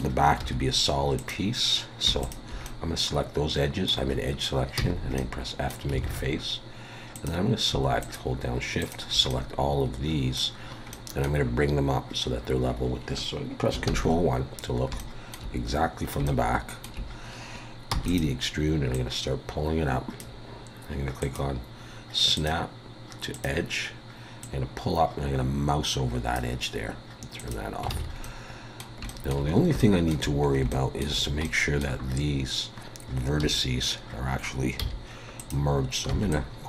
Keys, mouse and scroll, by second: 0.4 2, 1.2 click, 2.2 shift+click, 2.6 middle click, 4.8 f, 5.2 middle click, 6.0 alt+a, 7.1 click, 8.0 shift+click, 9.3 middle click, 10.9 middle click, 13.9 ctrl+KP_1, 15.0 shift+middle click, 15.8-16.3 scroll up 2, 16.3 shift+middle click, 17.9 e, 18.9-27.9 click, 27.9 alt+a, 28.2 middle click, 29.1 shift+middle click, 29.5 scroll up 4, 29.9 shift+middle click, 30.1 shift+scroll down 1, 30.9 scroll up 1, 31.4 middle click, 33.4 1, 34.8 z, 36.1 b.